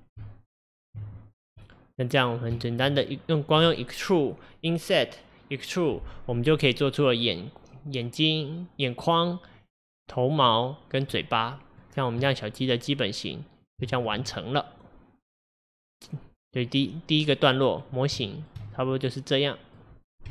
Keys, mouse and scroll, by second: 0.3 Tab, 1.4 scroll down 3, 1.7-3.1 middle drag, 3.1 scroll down 2, 3.3 scroll up 1, 11.2-12.0 middle drag, 12.0-12.3 scroll down 1, 12.3-15.9 middle drag, 15.9-16.3 scroll up 1, 16.9-20.3 middle drag.